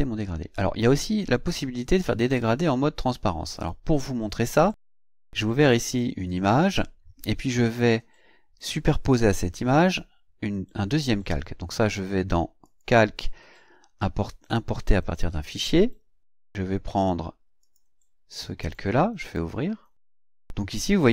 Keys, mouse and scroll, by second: 2.0 click, 3.6 click, 5.0 click, 12.6 click, 14.5 click, 17.6 click, 19.2 click.